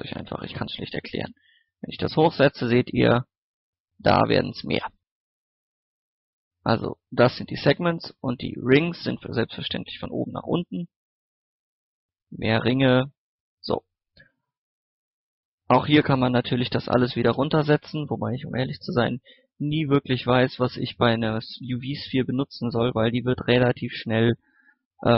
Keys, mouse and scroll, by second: 6.1 scroll down 1, 6.4 middle click, 9.2-10.4 drag, 14.3 middle click, 14.5 scroll up 1, 14.8 middle click, 15.6-16.0 scroll up 1, 16.5 click, 17.0 KP_8, 18.5 click, 19.0 KP_8, 20.4 middle click, 22.4 scroll up 1, 23.7 click.